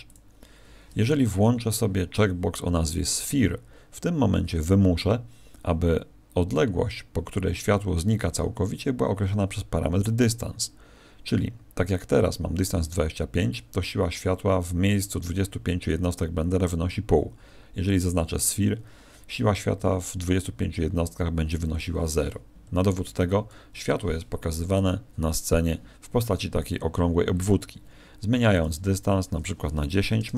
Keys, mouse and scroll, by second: 22.6 Escape, 23.7 KP_1, 24.9-25.2 scroll down 3, 25.5 scroll down 3, 28.5 click.